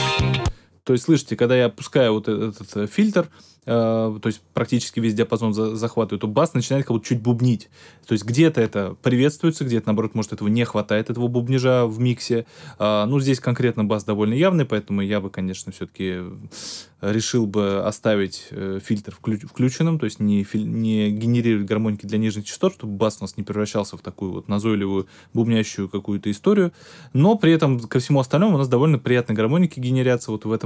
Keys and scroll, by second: 0.3 space.